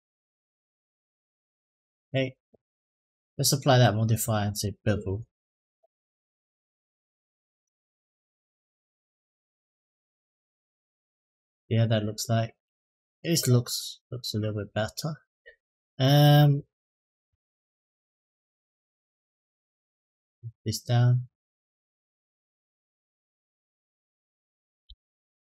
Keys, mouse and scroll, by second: 0.2 Tab, 0.8-1.3 right drag, 1.4-1.8 middle drag, 2.9-4.4 drag, 6.1-7.4 drag, 9.0 click, 9.8 click, 11.8 click, 12.2 middle click, 13.6-15.0 middle drag, 15.4 click, 17.0 s, 18.6 middle click, 20.2 click, 21.8 s, 23.9 middle click, 24.6 Tab, 25.0 middle click.